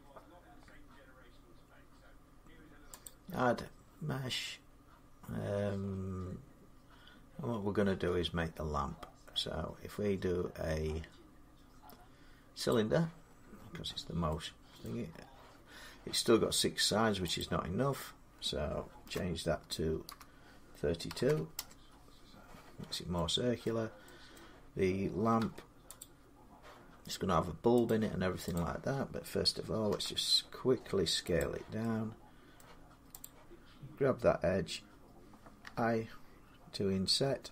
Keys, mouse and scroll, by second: 2.9-7.9 drag, 12.5 click, 13.1-14.3 scroll, 14.7 middle click, 17.2 click, 18.9 Delete, 19.9-21.4 typing, 23.5-25.8 middle drag, 25.2 Tab, 25.8 Return, 25.8 click, 27.7 click, 28.4 click, 29.7 s, 31.2 click, 32.4 middle click, 33.0 click, 35.4 i.